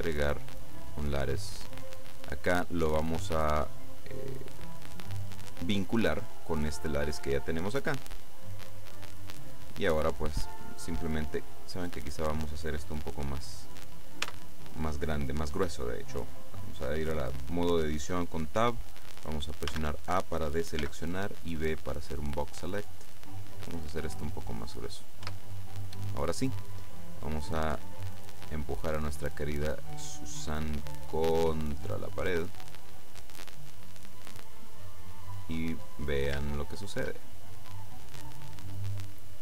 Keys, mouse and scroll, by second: 1.1 click, 3.4 click, 8.5 click, 12.0 right click, 14.3 Tab, 19.7 a, 20.9 b, 21.4-23.1 drag, 23.6-25.3 drag, 25.3 Tab, 26.3 right click, 27.1-33.0 drag, 33.3-35.9 middle drag, 35.9-36.6 scroll up 1, 36.6-37.7 shift+middle drag, 38.4-38.9 scroll up 2.